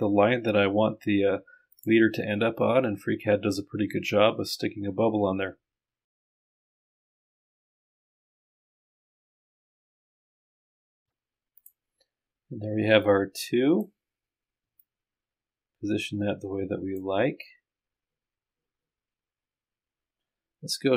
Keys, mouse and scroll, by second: 1.7 click, 6.4 click, 7.0-8.0 drag, 8.1 click, 11.6 click, 13.0-14.1 drag, 14.8-17.3 drag.